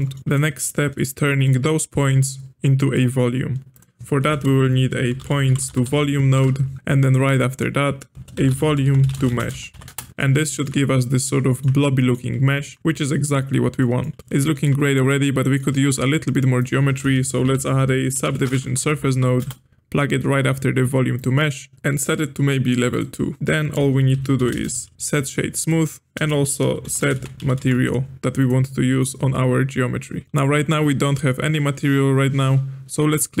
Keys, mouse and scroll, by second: 0.2 click, 1.4-3.7 middle drag, 3.7 click, 4.3 space, 6.9-7.3 middle drag, 7.3 click, 8.1 space, 10.1-12.8 middle drag, 12.8-13.3 drag, 13.8-16.6 middle drag, 16.6 click, 17.0 space, 18.9 Down, 19.1 Down, 21.7-22.9 middle drag, 22.9-23.4 drag, 23.7 space, 26.1 click, 26.2 space, 30.2 middle click, 30.2-32.0 scroll down 2, 33.1 click.